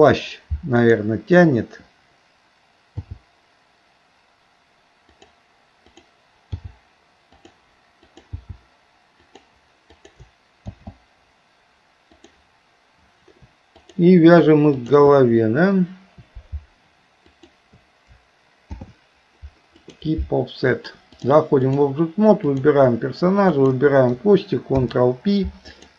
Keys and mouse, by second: 5.9 click, 8.1 click, 10.0 click, 13.8 shift+click, 14.9 click, 17.3 shift+click, 21.1 click, 22.5 click, 23.5 shift+click.